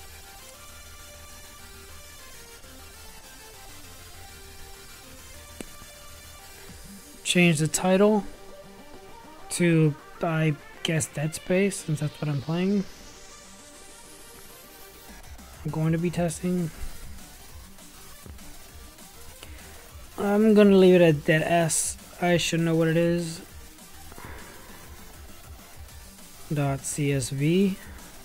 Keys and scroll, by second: 14.0-15.1 typing, 16.2 d, 17.4 d, 17.7 d, 19.6 e, 20.6-23.6 typing.